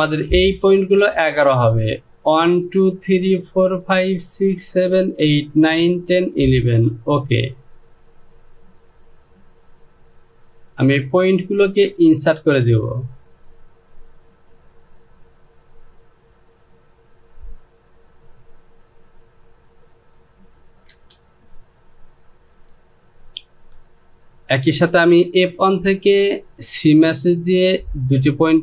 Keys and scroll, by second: 21.0 Return.